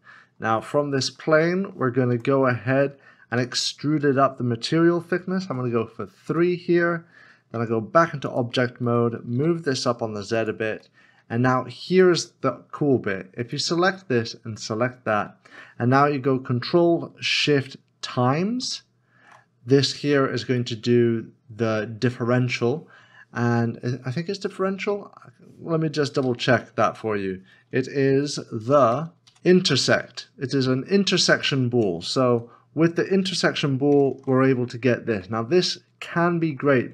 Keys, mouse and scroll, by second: 0.2 scroll down 1, 0.8 middle click, 2.1 Tab, 3.4 e, 5.5 3, 6.3 Return, 8.2 Tab, 8.9 g, 9.3 z, 11.0 middle click, 14.6 shift+click, 20.6 middle click, 27.2 ctrl+z, 32.2 ctrl+z, 35.2 middle click.